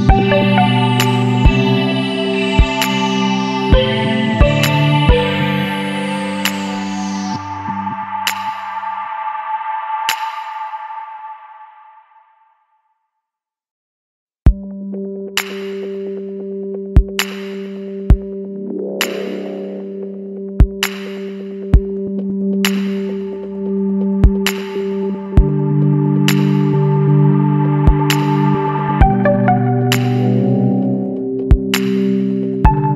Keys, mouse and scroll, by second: 1.4 middle click, 2.0 ctrl+z, 2.4 middle click, 2.7 Tab, 3.4-6.1 middle drag, 6.1 click, 9.5-11.8 middle drag, 11.8 click, 12.2-13.7 middle drag, 13.7 shift+h, 14.5 KP_Decimal, 15.3-16.4 middle drag, 16.4 click, 17.6-20.2 drag, 20.2 scroll down 1, 20.3-23.0 middle drag, 23.0 alt+h, 23.3-23.7 middle drag, 23.7 alt+a, 24.4 click, 24.7 scroll down 1, 24.8 middle click, 25.1-25.6 scroll up 2, 25.6 click, 26.1 scroll down 2, 26.2-27.2 middle drag, 27.2 scroll down 2, 27.3-28.7 middle drag, 28.7 click, 29.1 click, 30.0-31.5 middle drag, 31.5 click, 32.3 click, 32.7-32.9 middle drag.